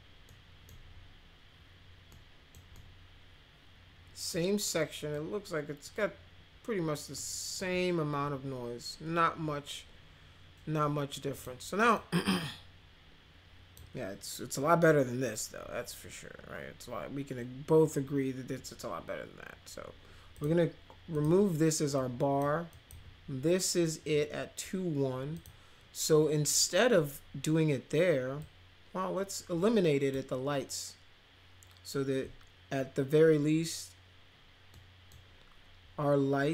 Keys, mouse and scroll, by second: 0.2 middle click, 2.1 middle click, 2.7-4.3 middle drag, 4.7 middle click, 7.1 middle click, 11.3 click, 11.9-13.7 drag, 20.3 click, 21.1 click, 21.9-22.4 drag, 22.7 click, 25.3 click, 28.4-30.1 drag, 34.7-35.1 middle drag.